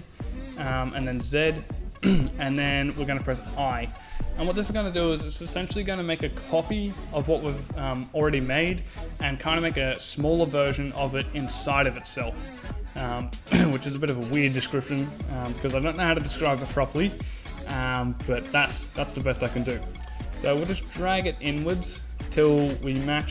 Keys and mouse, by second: 0.3 z, 2.7 i.